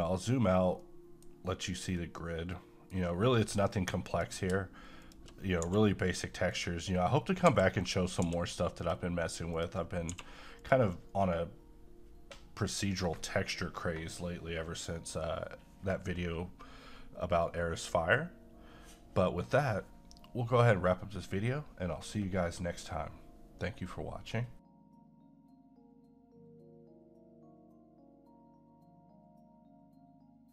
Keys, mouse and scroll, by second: 0.8 middle click, 1.2 scroll down 1, 2.0 middle click, 2.0-4.1 middle drag, 4.1 click, 5.0 shift+click, 5.7 g, 6.5 click, 7.5 g, 7.8 click, 8.2 g, 8.8 click, 10.1 g, 10.6 click.